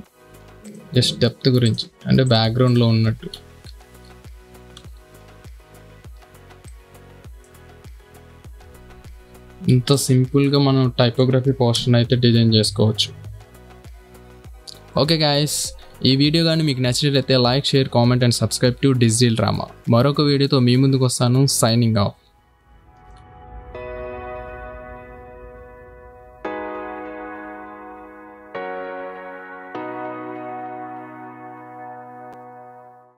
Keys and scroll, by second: 4.0 ctrl+z, 5.2 ctrl+z, 6.4 space, 9.1 ctrl+;, 9.8 space, 12.2 ctrl+KP_0.